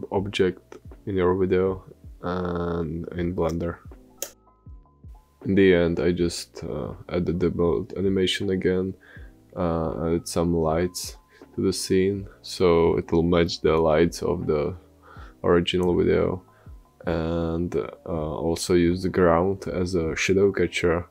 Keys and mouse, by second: 4.5-7.1 typing, 4.7 ctrl+z, 5.1 ctrl+z, 6.9 middle click, 7.5 middle click, 8.2 middle click, 8.5-9.3 typing, 9.1 middle click, 9.6 middle click, 10.3-12.0 typing, 11.1 ctrl+z, 11.8 ctrl+z, 11.8 ctrl+z, 11.9 ctrl+z, 12.2 click, 13.4-14.6 drag, 14.9-15.9 typing, 15.4 click, 16.2 click, 16.5 click, 17.1 click, 18.2 click, 18.6 middle click, 18.8 click, 18.8 middle click, 18.9 click, 19.4 space.